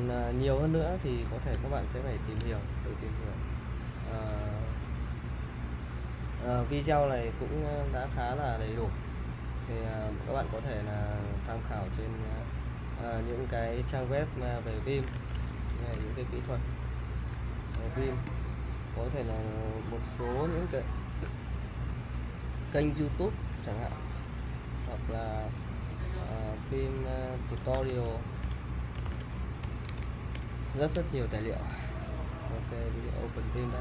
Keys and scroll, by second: 15.2 super+t, 15.6-17.2 typing, 17.7 Return, 26.8-30.5 typing, 32.7 typing.